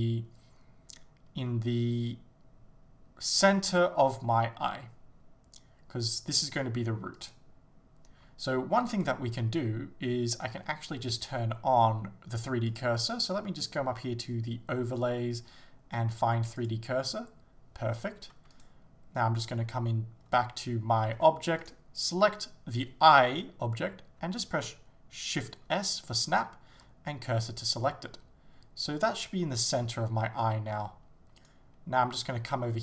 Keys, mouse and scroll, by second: 7.3 right click, 8.2 g, 9.1 right click, 16.6-18.6 drag, 18.6 right click, 21.2 Tab, 21.7 right click, 27.7 shift+s, 29.2-30.5 scroll up 1, 30.7 Tab, 31.5 right click.